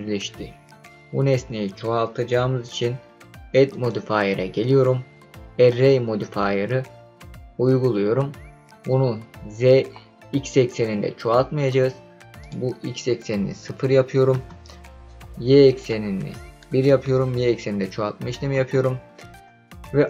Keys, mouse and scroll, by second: 3.7-6.0 drag, 12.4-14.3 drag, 15.8-18.5 drag.